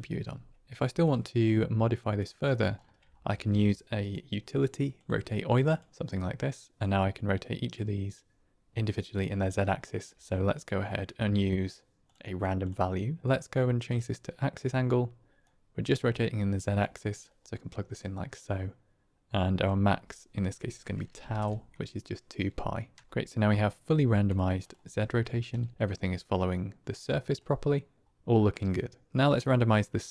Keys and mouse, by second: 1.4 click, 2.4 middle click, 3.0 shift+a, 6.8 click, 7.7 click, 8.1-9.7 drag, 9.7-10.1 middle drag, 10.1 shift+a, 13.8 click, 15.4-16.7 drag, 17.4 click, 19.7-23.3 drag, 24.2 click, 24.5 click, 25.7 click, 27.1 middle click, 29.8 middle click.